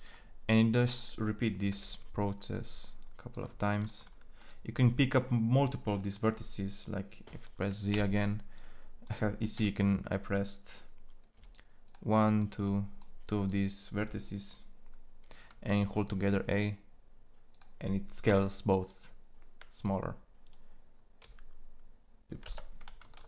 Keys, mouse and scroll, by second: 1.5 e, 7.7 z, 9.3 a, 11.1 a, 12.4 c, 15.5 ctrl+a, 18.1 z, 20.9 s.